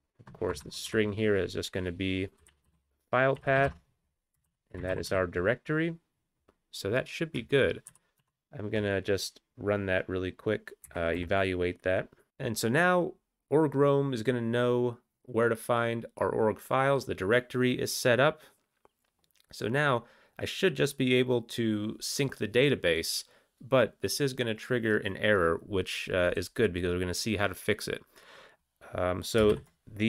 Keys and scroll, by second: 0.6-3.6 typing, 5.4 ctrl+e, 5.4 ctrl+x, 5.4 ctrl+s, 7.9 ctrl+x, 8.8 ctrl+e, 10.8 Up, 11.0 Return, 11.2 Down, 29.5 alt+x.